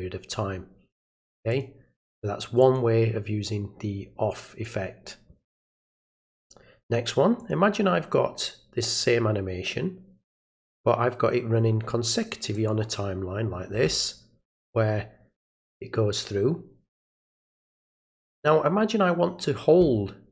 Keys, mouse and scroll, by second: 1.5 click, 2.6 click, 4.6-6.4 drag, 7.4 click, 12.5 click.